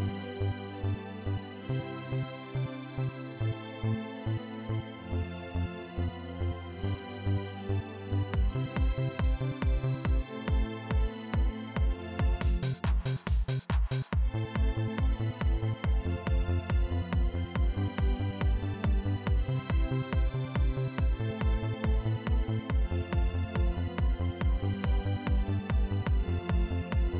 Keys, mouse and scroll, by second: 4.2 click, 5.5-9.9 drag, 10.0 click, 10.8 right click, 12.2 click, 15.2 click, 17.0 click, 18.2-19.4 drag, 24.1 click, 25.8 click.